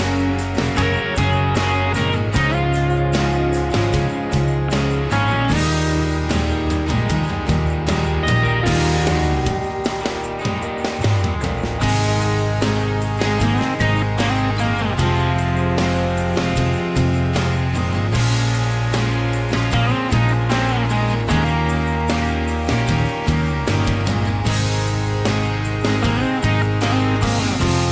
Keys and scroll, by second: 1.9 ctrl+z, 2.0 ctrl+z, 3.1-7.4 typing, 9.5 Escape, 10.3 r, 11.6-13.2 typing, 13.3 Return, 13.9 Delete, 14.4-19.0 typing, 16.3 ctrl+g, 20.2 r, 21.7-24.1 typing, 23.5 ctrl+g, 25.4 Escape.